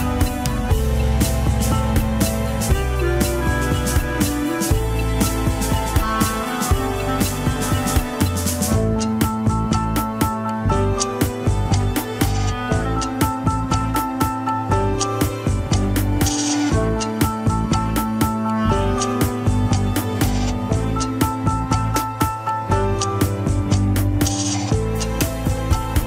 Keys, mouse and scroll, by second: 1.7 scroll up 1, 2.0 shift+middle click, 2.4 scroll up 1, 2.9 Tab, 3.1 alt+z, 3.4 click, 3.7 shift+s, 4.2 scroll down 2, 6.3 shift+a, 6.8 click, 7.2 scroll down 3, 7.4 s, 8.3 scroll up 1, 8.4 s, 9.1-9.9 scroll up 7, 9.4 shift+middle click, 10.1 s, 11.6 F2, 19.0 click, 20.0-20.5 scroll up 2, 20.5 r, 21.2 ctrl+r, 22.2 scroll down 3, 23.1-24.7 right drag, 24.7-25.3 scroll down 3, 25.3 alt+h, 25.5 middle click.